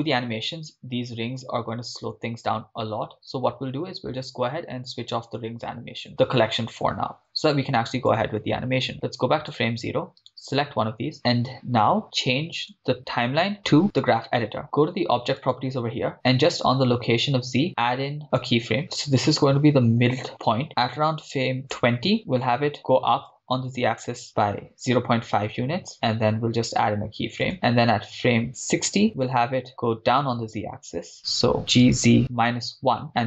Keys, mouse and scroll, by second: 0.4-0.9 scroll down 1, 2.9-3.4 scroll down 3, 3.4-3.9 scroll up 4, 5.1 click, 8.2-10.3 drag, 10.3 right click, 14.0 click, 15.4 click, 18.5 click, 18.8-19.6 scroll up 3, 19.6-20.5 scroll up 1, 21.7-22.8 drag, 22.8 g, 23.3 z, 24.5 0, 24.6 ., 24.7 5, 25.7 Return, 27.4 click, 29.3-30.8 drag, 31.6 g, 31.8 z, 32.2 -, 32.4 1, 33.1 Return.